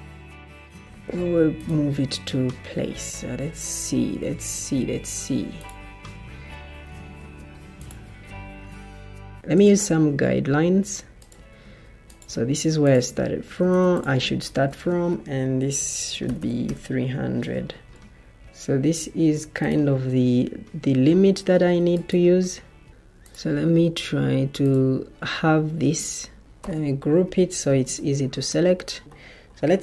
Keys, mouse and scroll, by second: 2.4 ctrl+d, 3.3 ctrl+d, 5.5 ctrl+d, 9.3 ctrl+d, 14.6 ctrl+d, 15.5 shift+Tab, 16.6 typing, 17.0 Return, 19.8 Escape, 21.8 Escape, 24.4 ctrl+g, 24.4 ctrl+d, 26.1 ctrl+z, 26.5 ctrl+g, 27.1 ctrl+d, 29.4 typing, 29.5 Return.